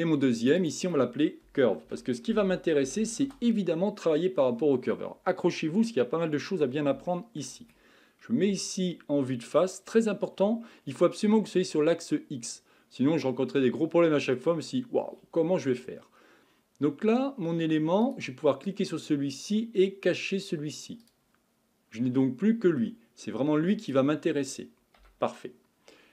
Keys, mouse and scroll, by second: 0.4 click, 0.6-3.7 drag, 4.9-5.8 scroll down 2, 5.8-8.5 middle drag, 8.5 KP_1, 10.3-13.4 scroll down 1, 13.7-18.0 shift+middle drag, 18.0 click, 21.0 click, 21.8 scroll up 2, 22.2-23.8 middle drag, 23.8 click, 25.0 KP_1.